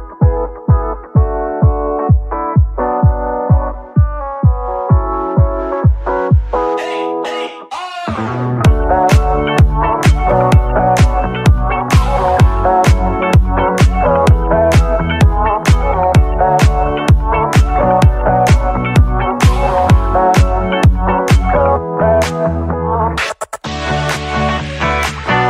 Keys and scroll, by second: 13.4 Escape, 16.4 Escape.